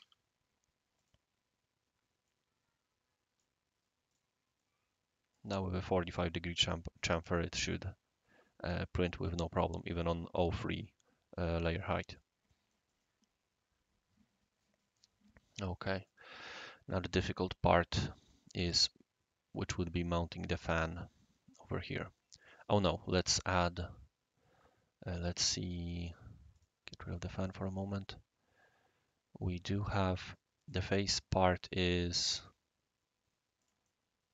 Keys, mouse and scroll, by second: 0.0 3, 0.9 click, 2.2-3.4 right drag, 4.1 click, 4.6-5.4 middle drag, 11.8-12.2 right drag, 12.5-13.2 middle drag, 12.9-16.1 right drag, 16.9-20.5 right drag, 21.5-22.5 right drag, 26.0 click, 26.5 click, 27.1-30.7 right drag, 31.7 click, 32.3 click, 33.6 click, 33.8 right click.